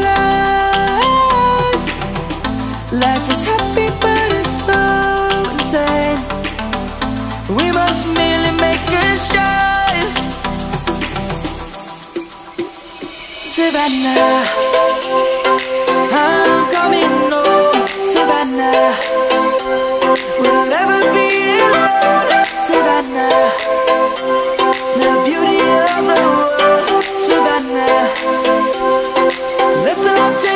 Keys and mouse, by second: 10.1 middle click, 15.5 shift+middle click, 26.4 shift+b, 28.9 Return.